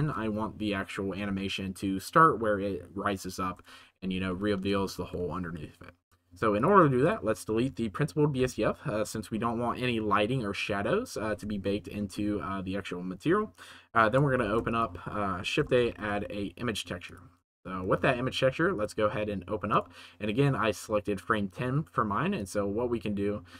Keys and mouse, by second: 4.2-4.6 shift+middle drag, 4.9 ctrl+s, 6.5 click, 7.0 click, 8.3 Delete, 9.0 middle click, 14.4 shift+a.